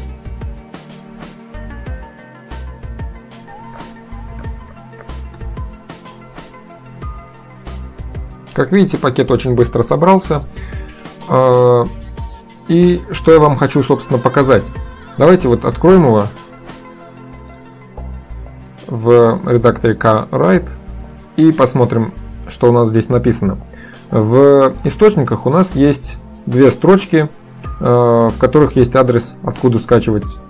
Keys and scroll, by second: 3.4-5.6 typing, 8.0 typing.